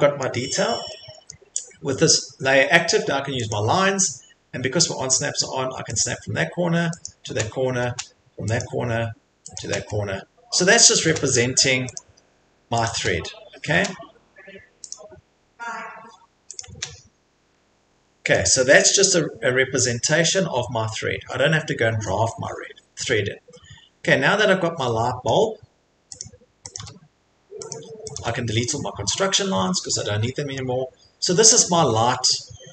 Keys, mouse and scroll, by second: 0.2 middle click, 0.5 middle click, 0.6 middle click, 1.3 middle click, 3.5 click, 4.0 middle click, 4.0 middle click, 4.6 scroll, 6.0 click, 7.0 click, 8.1 middle click, 8.6 click, 9.6 click, 9.9 middle click, 10.0 middle click, 10.3 middle click, 10.6 middle click, 10.6 middle click, 11.9 click, 12.9 click, 13.3 middle click, 13.3 middle click, 13.4 middle click, 14.9 click, 16.1-16.5 scroll, 16.6 click, 17.0-17.8 scroll, 18.3 middle click, 19.1 scroll, 19.6 scroll, 20.3 scroll, 21.0-22.1 scroll, 22.3 scroll, 22.9 scroll, 23.9 scroll, 25.3 scroll, 25.6 middle click, 25.6 middle click, 25.7 middle click, 26.2 click, 26.8 click, 26.8 Delete, 27.7 click, 28.2 Delete, 28.2 click, 29.0 middle click, 29.1 middle click, 29.9 middle click, 30.5 middle click.